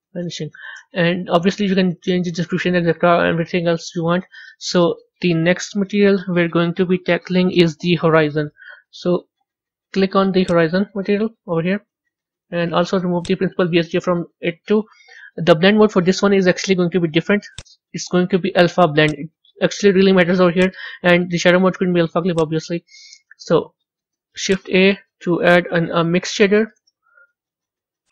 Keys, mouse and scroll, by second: 2.2-10.5 drag, 14.1 Delete, 19.2-24.4 drag, 24.4 shift+a.